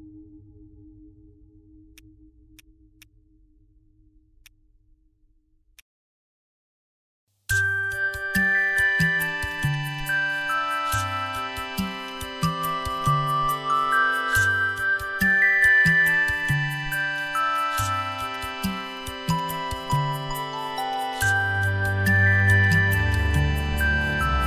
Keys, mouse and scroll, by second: 5.8 alt+click, 10.9 ctrl+z, 18.1 right click, 21.2 ctrl+z, 23.1 alt+click.